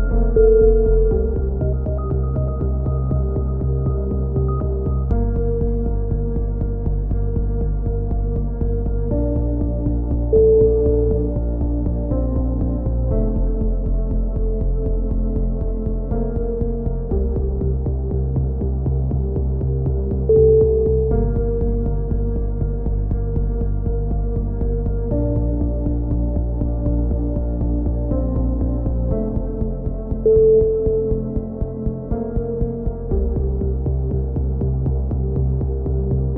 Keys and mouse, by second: 0.5 ctrl+r, 1.8 z, 3.4 click, 3.4 z, 4.4 KP_3, 7.2 z, 8.5 ctrl+z, 9.5 click, 10.3 KP_1, 12.4 z, 12.6 z, 14.0 KP_3, 14.4-16.4 middle drag, 15.7 b, 16.4-17.8 drag, 16.6 z, 16.8 right click, 19.2 middle click, 19.6 middle click, 20.5 KP_3, 20.8 z, 21.8 middle click, 24.6 ctrl+KP_7, 25.5 z, 25.9 click, 26.8-28.0 middle drag, 26.9 z, 28.0 z, 28.3 z, 31.9 middle click, 31.9 z, 32.2 z, 35.4 KP_3, 35.9 z, 36.0 click.